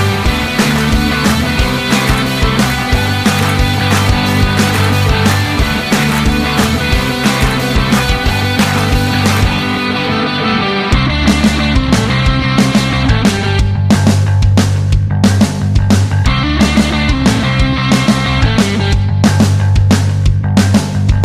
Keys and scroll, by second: 0.9 ctrl+d, 7.5 ctrl+d, 8.1 ctrl+d, 8.7 ctrl+d, 9.3 ctrl+d, 10.0 ctrl+d, 10.6 ctrl+d, 11.5 ctrl+d, 12.1 ctrl+d, 12.8 ctrl+d, 13.4 ctrl+d, 14.7 ctrl+d, 15.2 ctrl+d, 16.2 ctrl+d, 16.8 ctrl+d, 17.8 ctrl+d, 18.7 ctrl+d, 19.7 ctrl+d.